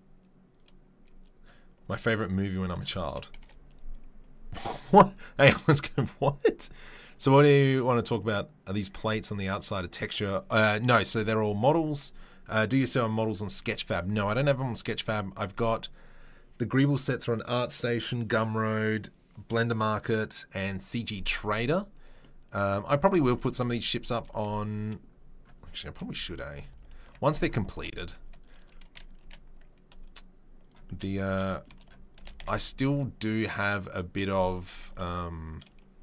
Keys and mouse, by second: 3.4 KP_7, 26.0 KP_3, 26.4 KP_1, 26.6 ctrl+click, 26.7 ctrl+middle click, 26.8 ctrl+click, 26.9 ctrl+middle click, 27.1-35.5 middle drag, 27.7 b, 29.2 g, 32.2 shift+d, 34.9 Delete, 35.5 click, 35.6-36.0 middle drag.